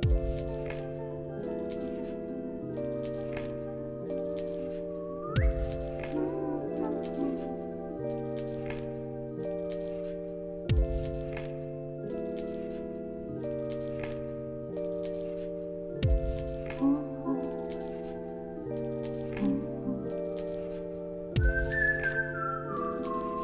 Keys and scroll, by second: 1.3 ctrl+c, 1.5 ctrl+v, 2.2 alt+x, 7.0 ctrl+c, 7.2 ctrl+v, 7.8 alt+x, 11.5 ctrl+v, 12.0 alt+x, 16.9 alt+x, 19.1 alt+z, 20.3 alt+x.